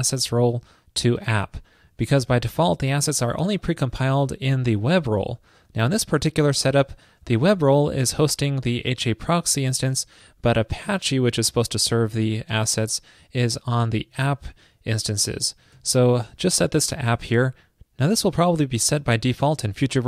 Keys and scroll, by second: 8.0 alt+shift+Left, 15.8 super+s.